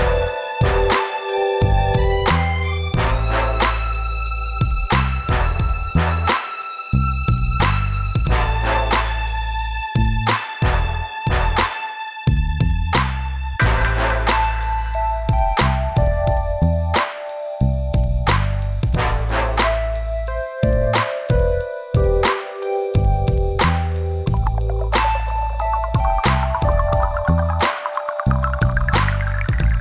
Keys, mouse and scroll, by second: 0.1 scroll up 2, 1.1 click, 4.2 scroll down 2, 5.4 scroll down 1, 5.5 scroll up 2, 6.6 middle click, 8.3 click, 8.9 click, 10.2 scroll up 1, 11.3 click, 17.0 click, 18.3 click, 21.4 click, 23.7 click, 23.8 click, 24.4 scroll down 2, 26.9 click, 27.4 click, 27.5 click, 28.1 scroll down 2, 28.9 scroll up 1, 29.6 scroll up 1.